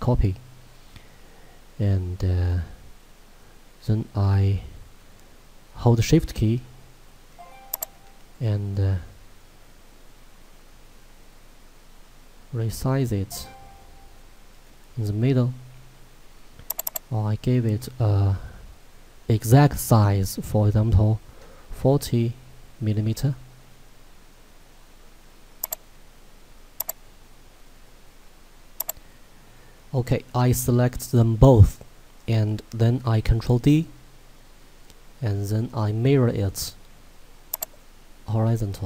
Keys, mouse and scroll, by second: 6.3 shift+Num_Lock, 8.3 shift+click, 21.4 BackSpace, 25.6 click, 32.9 ctrl+Num_Lock, 33.5 ctrl+d.